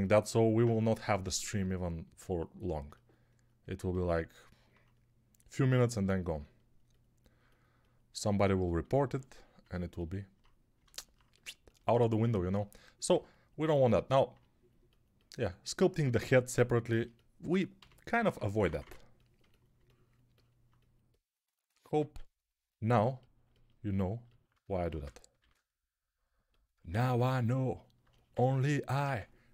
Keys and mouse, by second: 17.6-18.7 typing, 25.3 shift+r, 27.0 shift+r, 28.9-29.5 typing.